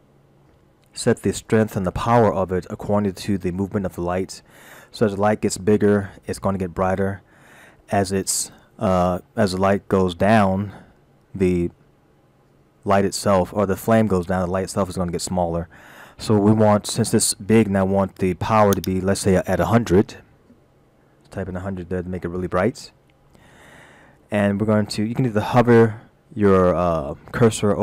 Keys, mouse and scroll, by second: 18.8 click, 21.1 0.